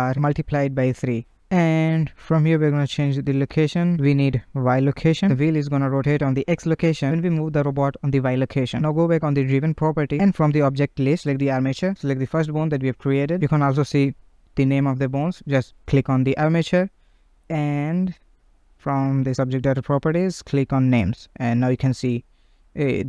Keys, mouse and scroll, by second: 7.4-10.5 right drag, 18.3 click, 20.9 click.